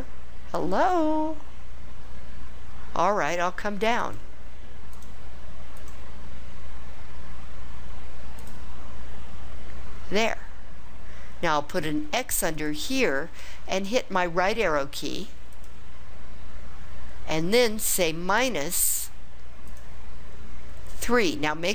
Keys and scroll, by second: 4.0 Down, 4.9 Down, 5.7 Down, 8.4 Return, 12.6 x, 15.5 ), 19.7 -.